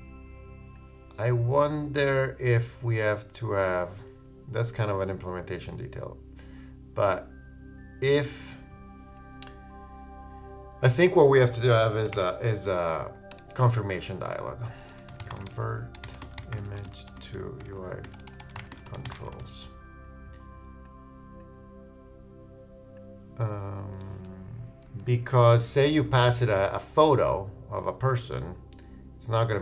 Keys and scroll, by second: 15.0 shift+Return, 15.1 shift+c, 16.3-18.9 typing.